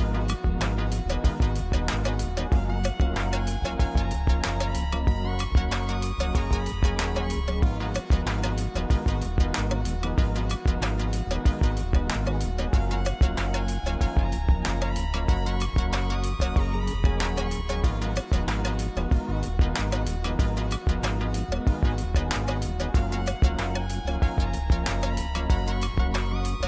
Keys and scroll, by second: 5.9 shift+z, 9.7 shift+d, 9.8 x, 11.9 shift+r, 13.0 g, 13.2 x, 19.3 g, 19.5 x, 21.3 shift+d, 21.5 y, 23.3 shift+z, 25.7 g, 25.8 y.